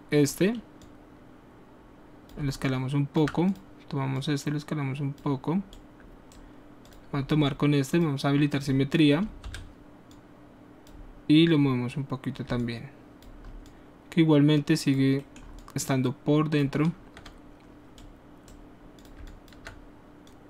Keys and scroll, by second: 9.5 w.